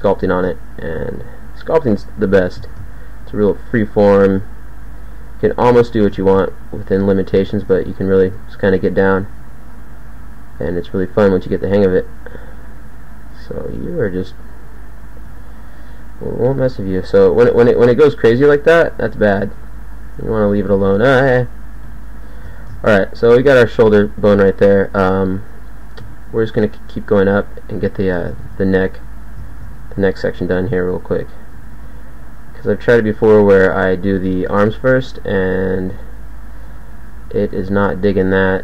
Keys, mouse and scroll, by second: 0.3 ctrl+a, 2.1 g, 2.7 ctrl+a, 3.8 g, 4.7 e, 6.2 ctrl+a, 9.3 g, 10.5 g, 15.3 z, 16.5 KP_1, 17.3 z, 18.3 g, 19.5 g, 21.9 g, 26.1 e, 27.3 s, 28.5 ctrl+a, 29.5 ctrl+a, 30.5 g, 31.6 e, 33.3 g, 34.4 g, 35.3 g, 37.5 e.